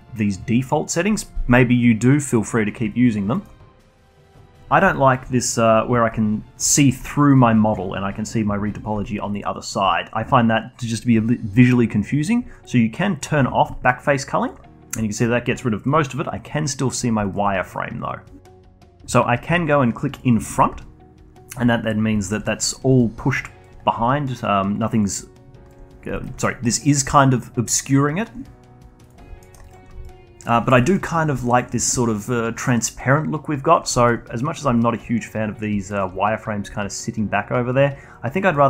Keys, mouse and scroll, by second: 2.8-3.3 alt+drag, 3.3 alt+middle click, 3.5 scroll down 1, 3.7-12.0 alt+drag, 13.1 click, 13.8 alt+click, 14.7 scroll up 1, 14.9-18.4 alt+drag, 20.1 click, 20.7-29.0 alt+drag, 29.4 alt+middle click, 29.6-38.5 alt+drag, 38.5 alt+middle click.